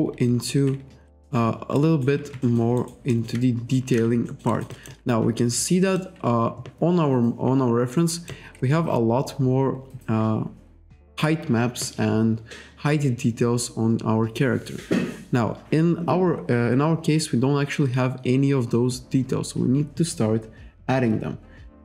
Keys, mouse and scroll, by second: 1.8 alt+right click, 2.4 alt+middle click, 2.8 alt+right click, 3.1 alt+middle click, 4.3 alt+middle click, 4.5 alt+right click, 4.7 alt+click, 5.4 alt+middle click, 7.4-7.8 scroll up 1, 8.0 middle click, 8.6-9.1 scroll down 1.